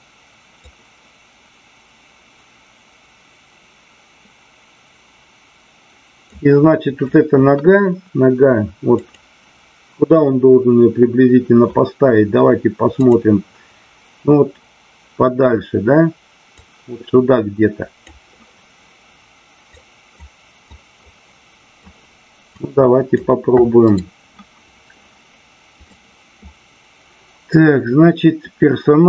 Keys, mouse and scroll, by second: 0.5-6.4 drag, 8.9 click, 16.6-18.1 drag, 19.7 click, 20.8 click, 22.4 click, 23.9 right click, 25.7 click.